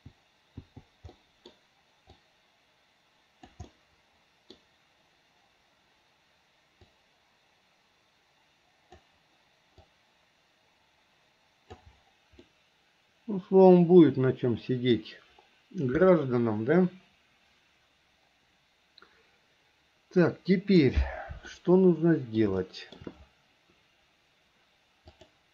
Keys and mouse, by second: 0.8 click, 1.3 middle click, 2.4-3.7 drag, 3.9 middle click, 4.5 click, 4.6 middle click, 7.0 click, 7.2-9.2 drag, 10.2-12.0 drag, 12.6-15.2 middle drag, 21.7 middle click, 22.7 shift+middle click, 25.3 click.